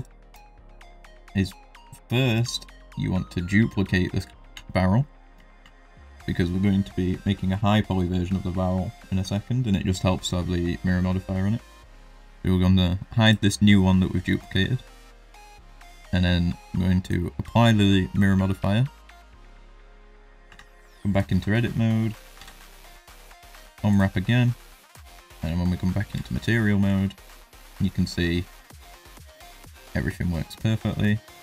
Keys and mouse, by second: 0.4 middle drag, 1.1 middle drag, 4.2 shift+d, 5.4 shift+middle drag, 5.8 middle click, 13.2 click, 16.0 middle drag, 17.1-19.3 drag, 20.4 Tab, 22.3 u, 26.5 middle click, 26.5 z, 26.8 Tab, 27.1 middle drag, 27.6 shift+middle drag, 27.8-28.3 middle drag, 28.6 middle drag, 29.1 middle drag, 29.6 shift+middle drag, 29.8-30.4 middle drag.